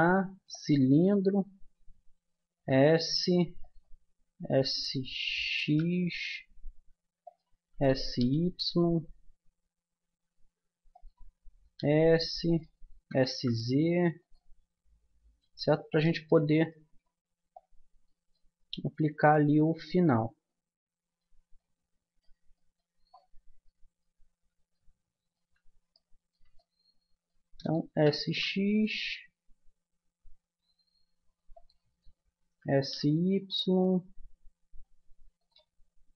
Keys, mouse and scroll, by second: 2.5 s, 4.4 s, 7.7 s, 11.7 s, 12.9 s, 15.4 g, 16.3 click, 27.9 s, 32.4 s, 35.8-36.1 middle drag.